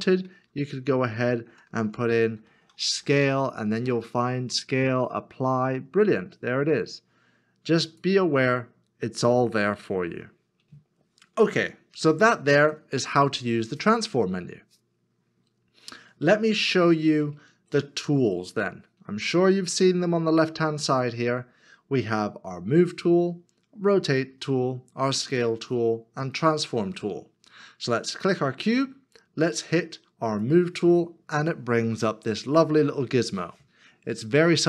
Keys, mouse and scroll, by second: 0.1-3.0 typing, 15.9 scroll down 1, 18.6 scroll up 1.